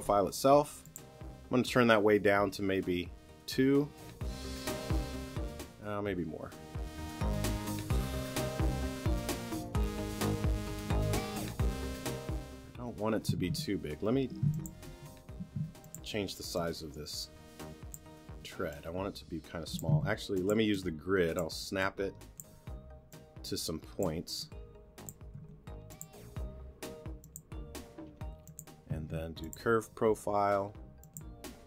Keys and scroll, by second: 13.4 t, 15.6 t, 19.9 t, 25.4 t, 29.0 t.